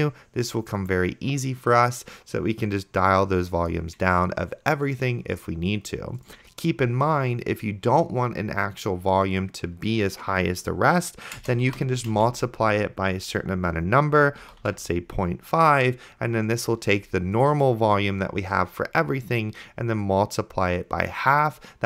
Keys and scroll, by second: 12.0 shift+8, 12.1 space, 14.2-15.2 typing.